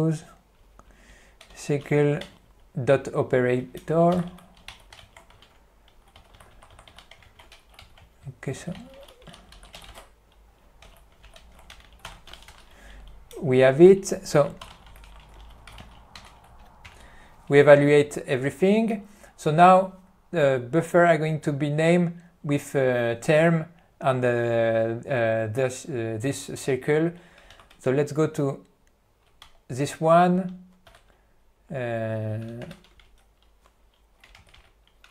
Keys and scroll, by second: 2.3 Return, 3.7-5.3 typing, 6.4 f, 7.4 alt+w, 8.0 n, 9.3-10.5 typing, 11.4 alt+s, 11.8 Return, 12.0-13.5 typing, 14.8-16.3 typing, 27.7 ctrl+e, 29.5 Return, 31.0 Down.